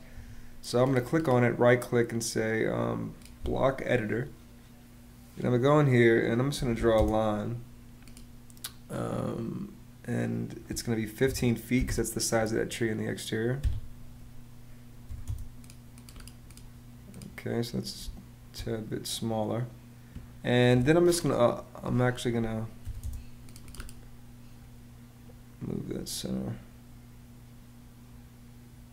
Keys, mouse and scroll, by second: 6.0-7.0 typing, 11.0 l, 11.5 ', 11.6 Return, 13.6 Escape, 14.8 m, 15.0 space, 17.7 space, 22.5 m, 22.8 space.